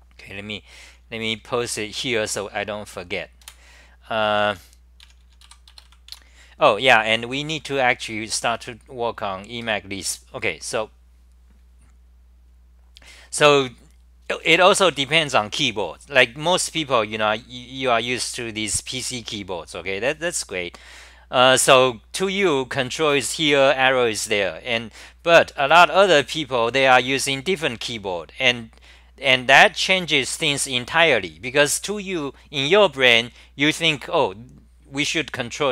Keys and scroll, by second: 0.9 s, 3.4 super+w, 4.3-5.9 typing, 6.1 Home, 7.5-8.5 typing.